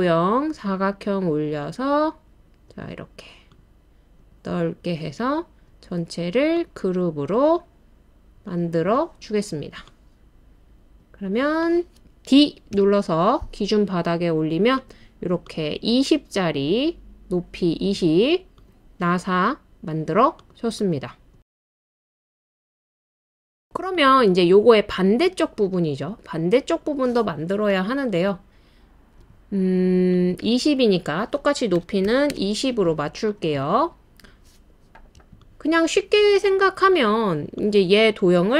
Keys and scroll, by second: 2.9 typing, 9.0-10.5 typing, 12.7 typing, 31.8-32.3 typing.